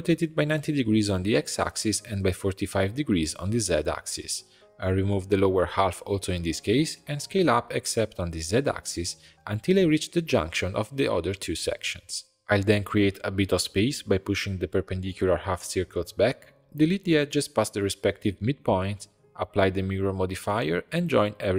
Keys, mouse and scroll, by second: 0.5 middle click, 1.3 r, 3.1 r, 4.4 click, 4.7 b, 6.5 x, 7.5 middle click, 8.0 a, 8.4-11.5 scroll up 3, 12.1 scroll up 6, 12.3 g, 15.3 Tab, 16.0 ctrl+click, 16.3 x, 16.9 Tab, 17.1 drag, 17.4 click, 17.6 middle click, 17.8 Tab, 17.9 2, 18.1 click, 18.5 ctrl+click, 18.8 x, 19.2 Tab, 19.3 click, 19.8 ctrl+a, 20.3 click, 20.7 Delete, 21.3 click.